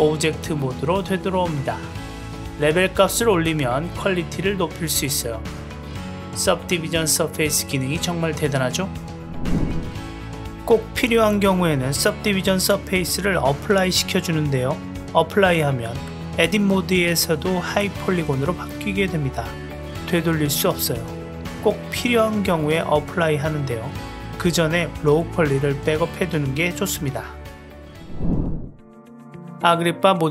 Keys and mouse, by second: 1.0 Tab, 1.1 click, 1.6-2.4 middle drag, 3.1 drag, 4.1 click, 6.1 click, 7.2 shift+drag, 7.8 Tab, 10.0 Tab, 10.6 click, 11.1 click, 13.5-15.8 drag, 16.4 click, 17.4 click, 18.6 Tab, 18.9 click, 22.4 Tab, 22.6 ctrl+z, 22.7 ctrl+z, 23.2 ctrl+z, 23.4 ctrl+z, 23.7 ctrl+z, 23.8 ctrl+z, 24.1 ctrl+z, 24.4 click, 24.7 click, 25.7 drag, 27.1 Tab, 29.5 Tab.